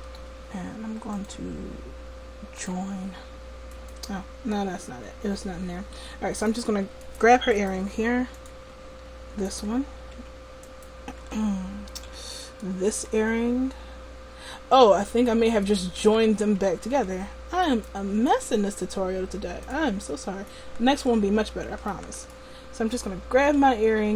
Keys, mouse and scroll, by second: 1.1-3.7 drag, 5.0-8.4 middle drag, 8.9 a, 10.1 a, 11.3-12.5 drag, 11.3 a, 12.1 b, 16.2 ctrl+z, 17.0 ctrl+z, 18.3 right click, 23.6 g.